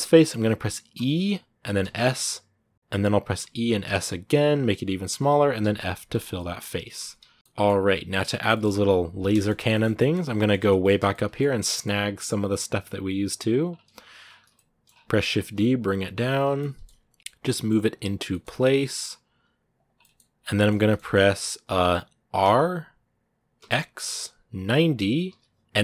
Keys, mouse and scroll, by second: 0.7 e, 2.7 ctrl+z, 6.1 middle click, 6.8 Tab, 7.2 s, 7.3 middle click, 7.6 scroll down 2, 7.7 middle click, 8.6-9.5 scroll down 2, 9.1 shift+middle click, 9.5-10.7 shift+middle drag, 10.7 scroll up 2, 10.9 shift+middle click, 11.7-13.0 scroll up 2, 13.0 right click, 13.4 scroll down 2, 14.0 scroll up 1, 14.3 shift+middle click, 14.7 scroll down 2, 15.2 shift+d, 16.4 shift+middle click, 16.8 g, 17.2 middle click, 17.3 g, 18.1 shift+middle click, 18.3 scroll up 1, 18.8 scroll up 1, 19.1 g, 19.8 middle click, 20.1-21.1 scroll up 4, 20.3 middle click, 20.5 shift+middle click, 21.2-22.2 middle drag, 22.2 r.